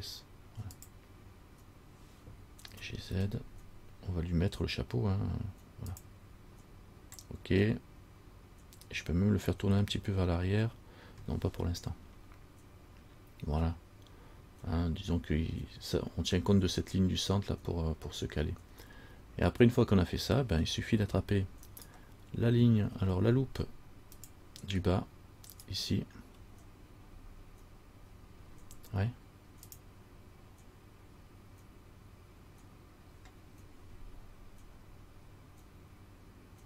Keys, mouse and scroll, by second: 2.9 g, 21.9 alt+right click, 24.4 click, 25.7 alt+right click.